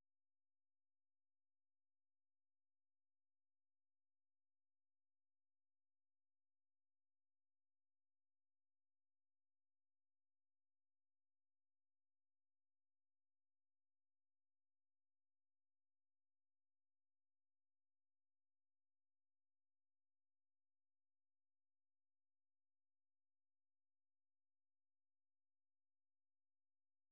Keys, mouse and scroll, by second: 11.3-25.6 drag.